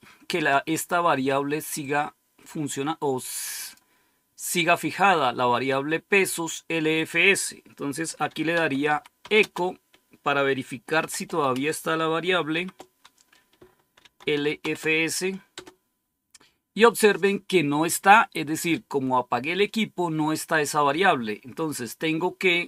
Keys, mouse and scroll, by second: 1.7-3.7 drag, 6.8 click, 7.9-9.6 typing, 10.9-11.4 typing, 12.4 typing, 13.6-15.4 typing.